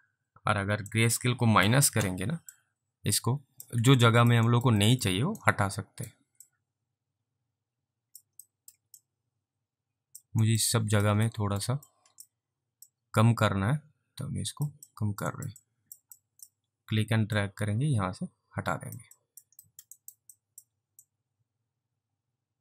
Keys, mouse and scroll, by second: 1.0 click, 2.6 click, 4.1 alt+click, 4.5 alt+right click, 4.9 alt+middle click, 5.5 ctrl+right click, 6.5 click, 8.6 alt+middle click, 9.1 click, 10.5 alt+right click, 10.9 alt+click, 11.4 alt+middle click, 11.9 alt+click, 12.9 click, 15.0 alt+click, 15.4 alt+right click, 15.7 alt+click, 16.2 alt+click, 17.4 click, 19.2 alt+click, 19.7 alt+middle click, 20.1 alt+double right click, 20.4 alt+click, 21.1 click.